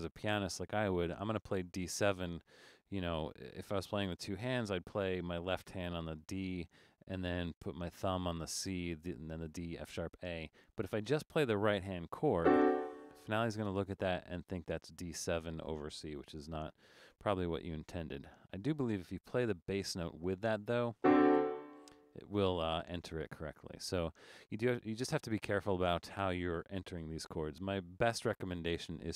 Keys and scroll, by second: 16.3 BackSpace, 17.0 BackSpace, 17.1 BackSpace, 27.0 BackSpace, 28.0 BackSpace.